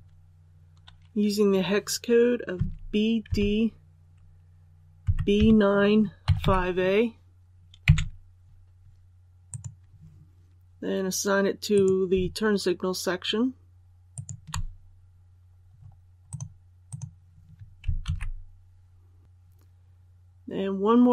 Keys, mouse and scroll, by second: 2.5-3.2 typing, 5.0-5.3 typing, 6.3 typing, 9.4 click, 11.7 right click, 14.1 shift+right click, 15.7-16.1 scroll down 1, 16.2 click, 18.0 alt+a.